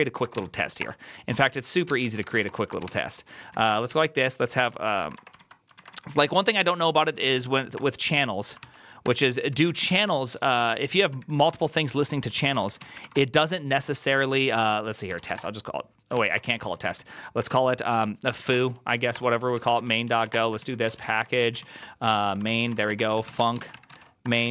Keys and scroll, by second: 0.0-24.5 typing, 1.8 ctrl+h, 8.5 ctrl+c, 11.6 Left, 11.7 Left.